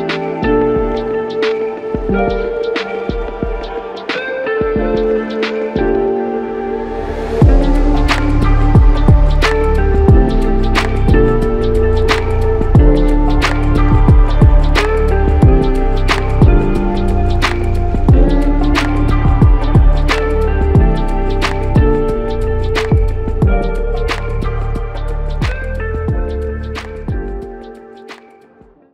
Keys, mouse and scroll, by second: 5.7 f, 6.9 double click, 18.9 alt+click, 21.4 shift+click, 22.7 shift+click, 24.7 alt+click, 25.6 alt+shift+click, 26.8 alt+click.